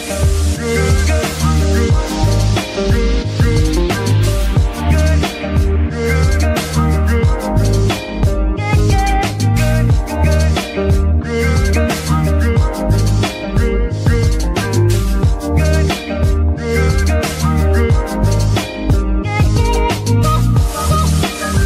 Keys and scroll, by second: 17.1 KP_0, 17.3 Return.